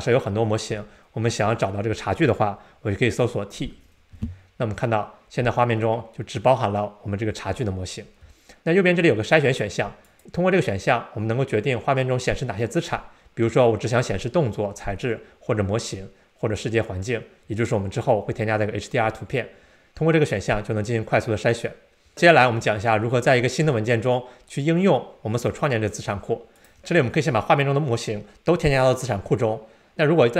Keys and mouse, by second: 10.1-25.3 drag, 26.6 click.